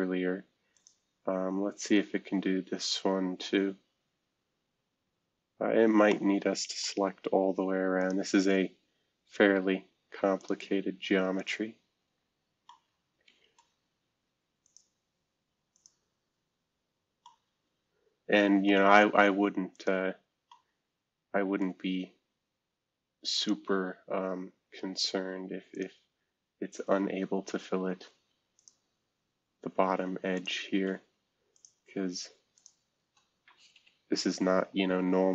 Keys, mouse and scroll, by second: 2.3 scroll down 2, 3.6-5.0 scroll up 2, 5.5-6.1 scroll up 2, 6.1-7.6 middle drag, 8.0 click, 12.3 scroll down 2, 12.6-13.7 middle drag, 13.8 middle click, 15.8 click, 16.3 scroll down 2, 16.9-17.4 scroll up 2, 17.2-19.7 middle drag, 20.5-23.4 middle drag, 22.1-23.4 scroll up 1, 23.4-24.9 drag, 25.7 click, 28.6 click, 30.3 click, 31.5 click, 32.5 shift+click, 33.7 Delete.